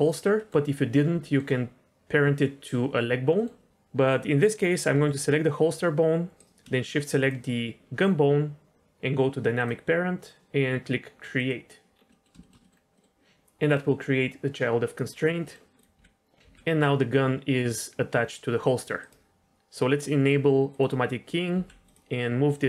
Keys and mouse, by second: 0.3 middle click, 1.2 shift+middle click, 3.3 middle click, 4.9 g, 9.5 click, 11.3 click, 12.1 middle drag, 12.4 shift+middle drag, 12.6 middle click, 12.9 middle click, 15.7 click, 15.9 g, 18.1 g, 20.7 click, 21.5 g, 22.0 g.